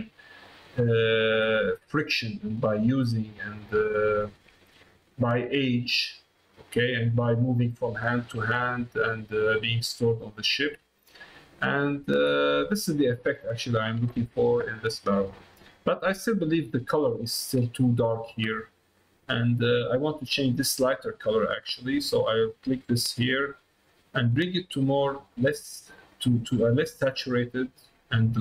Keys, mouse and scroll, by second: 0.1 middle click, 1.6 middle click, 2.4 shift+middle click, 3.2-4.4 middle drag, 4.7 shift+middle click, 5.7 ctrl+middle click, 6.8 middle click, 8.0 middle click, 8.9 middle click, 10.0 middle click, 11.0-12.0 ctrl+middle drag, 13.6 middle click, 14.3 shift+middle click, 14.6 middle click, 15.4 middle click, 16.2 middle click, 17.3 shift+middle click, 21.4 click.